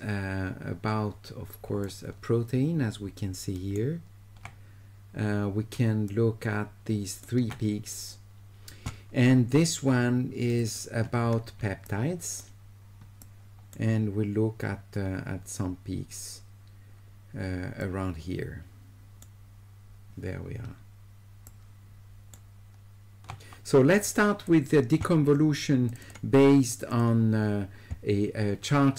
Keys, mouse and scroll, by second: 1.8-3.7 shift+right drag, 6.1 shift+right click, 10.5 ctrl+click, 10.7 ctrl+click, 11.9 shift+right click, 13.2 shift+right click, 17.8 shift+right click, 21.5 shift+right click, 24.0 click, 25.9 click, 26.0 click, 26.7 click, 26.9 click.